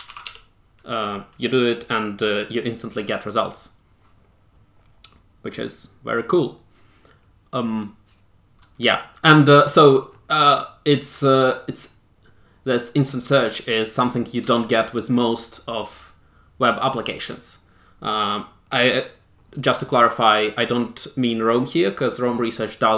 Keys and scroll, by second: 0.0-0.9 typing, 14.5 super+w.